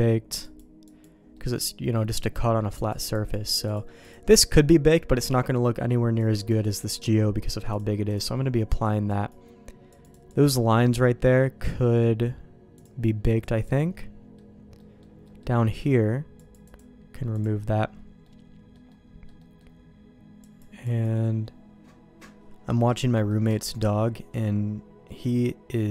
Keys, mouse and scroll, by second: 0.5 click, 0.9 click, 1.3 middle click, 2.8 click, 3.2 click, 3.7 click, 4.4 middle click, 6.2 click, 6.5-8.2 drag, 8.7 click, 9.1 click, 10.0 click, 13.3 click, 14.0 middle click, 14.8 middle click, 15.2 middle click, 16.4 click, 16.7-17.9 drag, 18.2 middle click, 18.9 middle click, 19.4 middle click, 20.4 click, 20.9 click, 22.7 middle click, 23.1 middle click, 23.5 shift+middle click, 24.1 middle click.